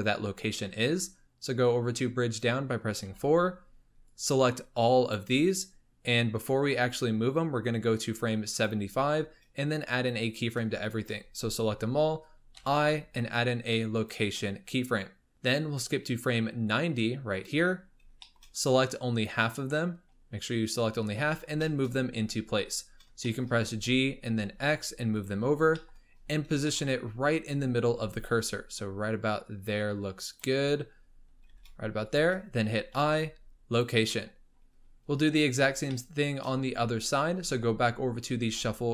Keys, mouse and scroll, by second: 3.0 4, 4.0 click, 7.6-9.3 drag, 9.3-9.8 scroll down 4, 10.4-10.8 scroll up 3, 10.8 shift+click, 15.7-17.8 drag, 17.8-18.2 scroll up 3, 18.2-18.6 shift+middle drag, 18.6 click, 20.0-20.7 scroll down 6, 20.7-21.6 scroll up 11, 21.6 shift+middle click, 22.0-22.9 scroll up 3, 22.9-23.2 scroll down 1, 23.2-23.6 shift+middle drag, 23.6 g, 25.4 scroll up 4, 25.7 shift+middle click, 26.1-28.0 scroll up 10, 26.6 shift+middle drag, 28.0 g, 30.6-31.3 scroll up 7, 31.3 g, 32.9 i, 34.2-35.9 scroll down 26, 35.9-38.4 shift+middle drag, 38.4 2.